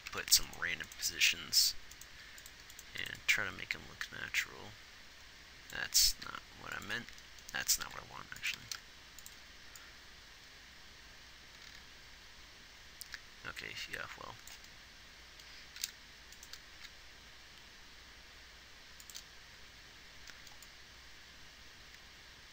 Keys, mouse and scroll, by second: 2.5 g, 3.2 x, 3.5-5.3 drag, 6.7 g, 8.3 r, 8.9 r, 10.7-11.9 right drag, 16.1 g, 17.1 g.